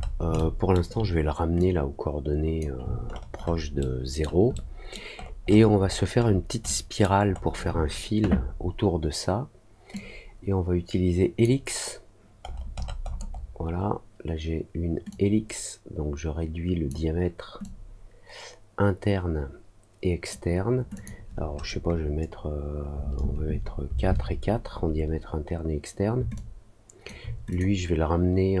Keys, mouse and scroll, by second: 0.3 alt+middle click, 1.5-2.5 drag, 3.0-4.1 alt+scroll up 3, 4.5 alt+middle click, 5.1-6.9 alt+scroll up 5, 6.9 alt+middle click, 7.2 alt+scroll up 1, 9.9-11.4 drag, 12.4 middle click, 12.7 middle click, 13.0 middle click, 13.3 middle click, 15.0-16.8 drag, 17.5-20.2 drag, 20.9 click, 26.3 alt+click, 27.4 click.